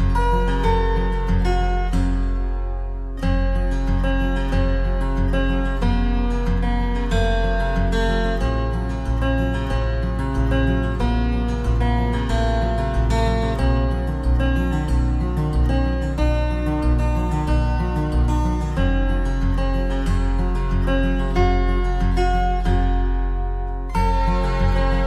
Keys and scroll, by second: 4.7 ctrl+=, 9.4 ctrl+0, 20.5 ctrl+=.